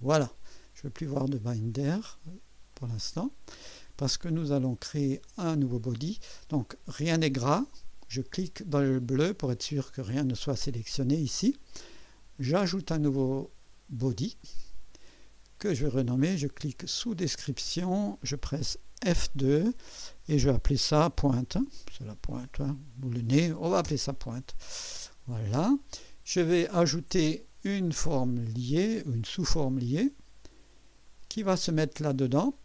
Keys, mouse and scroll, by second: 1.0 click, 1.6 click, 2.7 click, 4.6 click, 9.1 click, 14.4 click, 17.0 click, 19.1 F2, 20.9-23.8 typing, 28.5 click, 31.0 click.